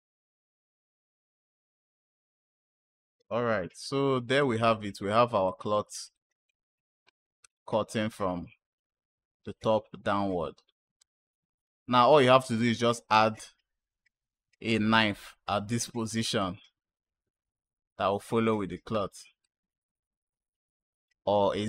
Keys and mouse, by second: 1.6 space, 3.0 space, 3.6 click, 5.3 click, 6.0 click, 7.4 space, 10.9 space, 11.1 click, 12.5 space, 14.6 space, 14.7 space, 16.0 space, 17.1 space, 19.3 click, 19.3 space, 21.2 space.